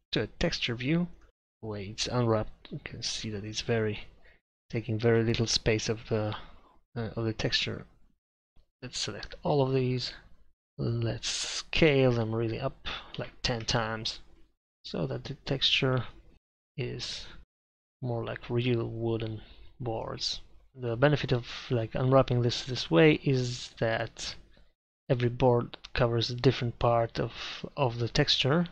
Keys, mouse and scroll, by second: 1.3 Tab, 5.5-8.5 middle drag, 8.5 a, 8.9 a, 10.5 a, 12.0 s, 16.6 KP_5, 23.7 Tab.